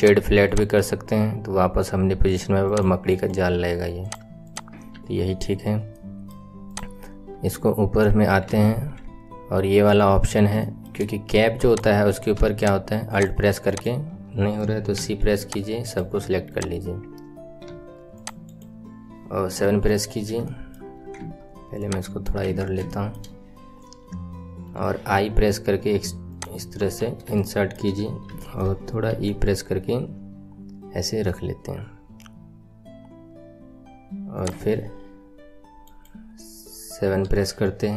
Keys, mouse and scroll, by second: 0.0 right click, 0.4 click, 0.7-1.7 right drag, 0.7 middle click, 1.7-2.6 middle drag, 2.6 click, 3.0 right click, 4.4 click, 4.9 KP_1, 5.8-6.6 middle drag, 6.6 click, 7.3 Tab, 8.0 scroll up 1, 8.6 alt+z, 9.4 scroll down 1, 9.5-10.6 scroll up 1, 10.6-11.6 shift+middle drag, 11.6 click, 13.0 alt+click, 13.6 alt+click, 16.4 click, 19.4 KP_7, 20.4 shift+middle click, 21.2 Tab, 21.7 click, 22.4 Tab, 22.8-24.6 shift+middle drag, 26.7 KP_1, 27.3 shift+middle click, 27.9-28.2 scroll up 5, 28.4 shift+middle click, 29.0 e, 36.6 right click, 37.0 KP_7.